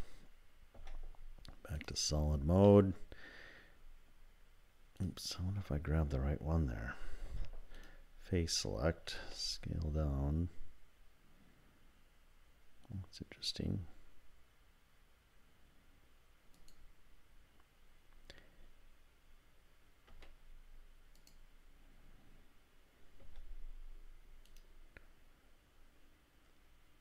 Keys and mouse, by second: 0.8 z, 2.7 click, 2.7 middle click, 5.1 click, 7.3 3, 7.8 click, 9.2 s, 20.1 s, 23.2 x.